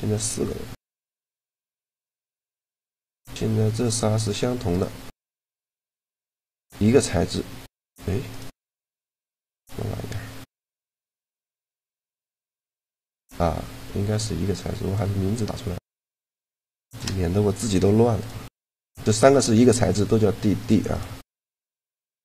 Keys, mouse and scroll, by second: 3.5-6.2 right drag, 6.7-9.7 right drag, 9.0-11.0 drag, 11.4-13.3 right drag, 14.6-17.3 drag, 16.1 d, 17.9-22.2 right drag.